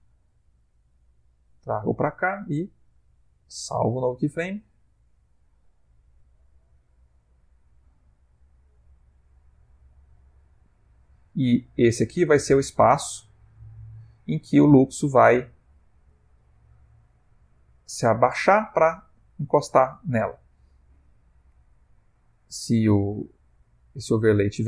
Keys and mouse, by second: 3.5 i, 6.4 click, 15.4 ctrl+middle click, 16.5 shift+middle click.